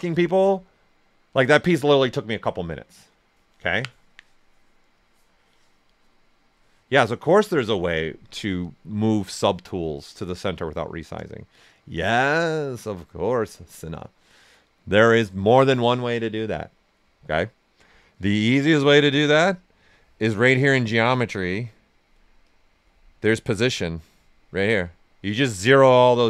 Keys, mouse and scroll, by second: 19.8-26.2 drag.